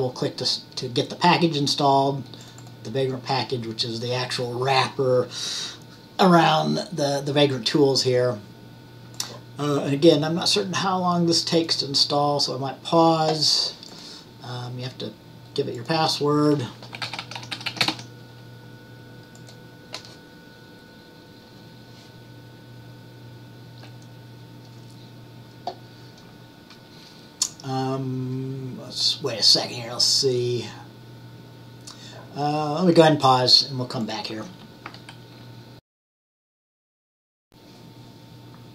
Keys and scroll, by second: 16.9-18.5 typing, 37.3-38.0 typing.